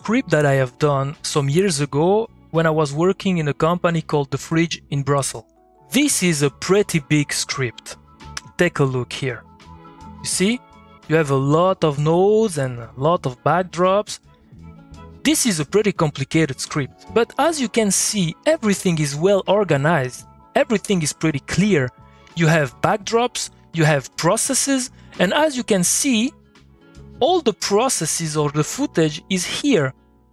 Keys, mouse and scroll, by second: 3.5 middle click, 4.3 click, 4.6-7.3 middle drag, 8.2 alt+Num_Lock, 8.2 alt+middle click, 8.3 alt+e, 9.6 middle click, 10.0 click, 10.7 middle click, 20.2 click, 20.4 middle click, 26.8 click, 27.0 middle click.